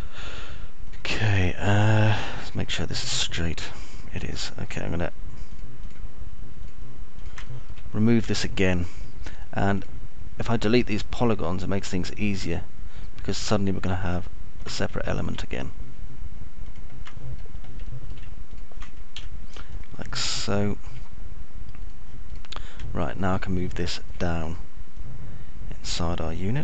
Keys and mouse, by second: 0.0 alt+middle click, 3.1-5.0 alt+middle drag, 5.8 ctrl+click, 7.0 ctrl+click, 9.0 alt+middle click, 9.8 alt+middle click, 14.8 ctrl+click, 16.5 alt+middle click, 18.6 middle click, 19.5 alt+middle click, 20.0 ctrl+click, 20.8 Delete, 21.6 alt+middle click, 24.5-25.6 alt+middle drag.